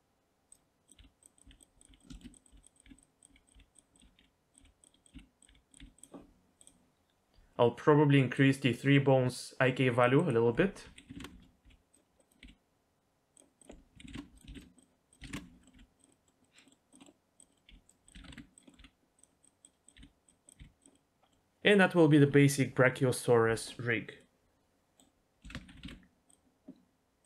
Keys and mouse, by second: 1.0-4.2 typing, 1.4 click, 1.8 click, 2.1 shift+middle click, 2.4 click, 4.0 click, 4.5 click, 5.1 click, 6.0 click, 8.5-11.2 drag, 11.6 g, 12.2 click, 12.4 g, 13.6 click, 14.4 ctrl+click, 14.8 click, 15.2 click, 15.6 middle click, 15.8 g, 16.1 middle click, 16.2 middle click, 16.4 middle click, 16.7 middle click, 17.0 middle click, 17.5 click, 17.7 g, 18.2 alt+r, 18.3 alt+g, 18.7 click, 18.8 r, 19.4 click, 20.0 g, 20.3 click, 20.6 g, 20.9 middle click, 21.1 middle click, 24.3-25.0 middle drag, 25.0 click, 25.4 a, 25.6 alt+r, 25.7 alt+g, 25.8 alt+s.